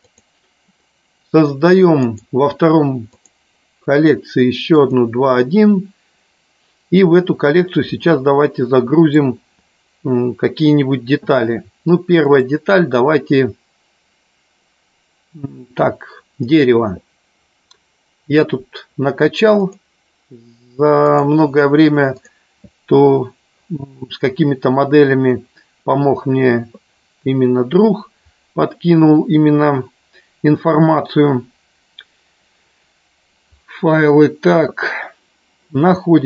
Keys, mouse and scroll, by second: 0.0 click, 2.0-3.2 right drag, 4.7 click, 8.6 middle click, 12.2-19.8 drag.